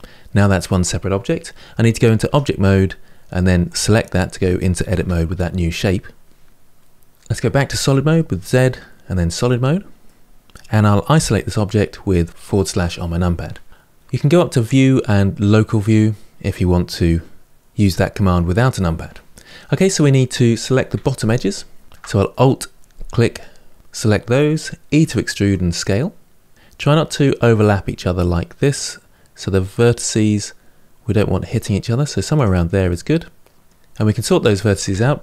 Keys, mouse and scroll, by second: 2.0 Tab, 3.4 click, 4.7 Tab, 7.6 z, 9.8-12.2 middle drag, 12.2 KP_Divide, 14.4-17.4 drag, 19.3-20.7 middle drag, 20.7 2, 21.8 alt+click, 24.8 e, 32.6-34.7 middle drag, 34.7 1.